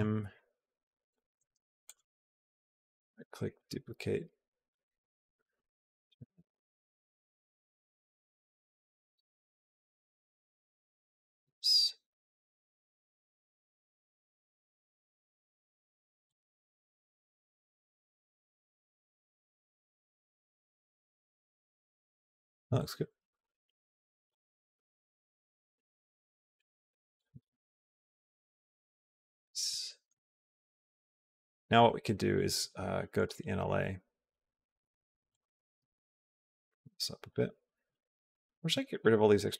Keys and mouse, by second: 2.8 right click, 4.5 click, 5.8 click, 8.9 g, 16.7 alt+middle click, 17.4 middle click, 17.8 middle click, 18.5 shift+middle click, 19.3 shift+middle click, 19.5 middle click, 20.2 shift+middle click, 20.4 middle click, 20.7-22.1 middle drag, 22.6 shift+middle click, 23.1 shift+middle click, 24.2-29.5 drag, 29.7 shift+middle click, 30.6 click, 33.0 click, 36.2 click, 37.1 click, 38.1 click, 38.8 click, 38.8 x, 39.2 click.